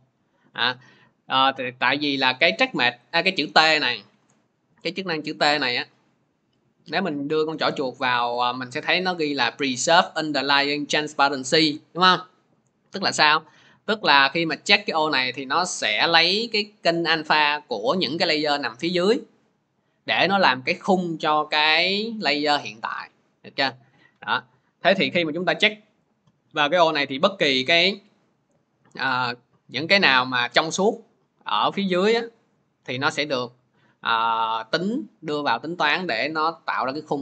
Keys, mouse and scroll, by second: 0.6 click, 17.8 click, 18.2 click, 21.0 click, 21.0 click, 24.6 click, 25.3 click, 26.0 click, 29.8 click, 31.9-37.2 drag.